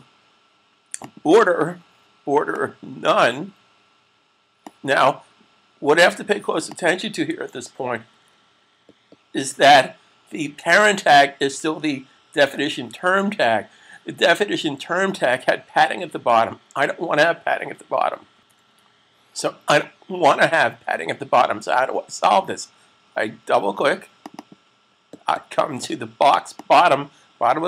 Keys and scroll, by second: 7.9 alt+super+d.